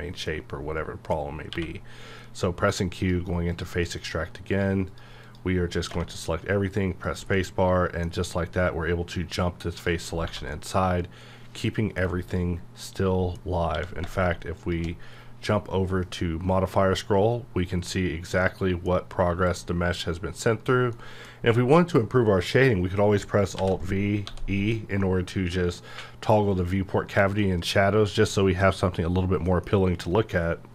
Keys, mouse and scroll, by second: 0.0-1.5 middle drag, 1.5 q, 3.0 click, 6.0 space, 7.1 click, 7.3-9.7 middle drag, 9.7 click, 10.2 1, 10.5-12.3 middle drag, 12.3 click, 12.8 middle click, 13.7 q, 14.6 shift+click, 15.2 scroll up 1, 15.9 scroll down 1, 16.3 scroll up 1, 16.8 scroll down 1, 17.4-17.8 scroll up 1, 17.8 scroll down 1, 18.4 middle click, 18.9 scroll up 1, 19.0-19.4 scroll down 1, 19.4-19.8 scroll up 1, 20.0 scroll down 1, 20.2-20.6 scroll up 1, 20.6 right click, 20.9-23.6 middle drag, 23.6 alt+v, 24.3 e, 24.8-30.7 middle drag.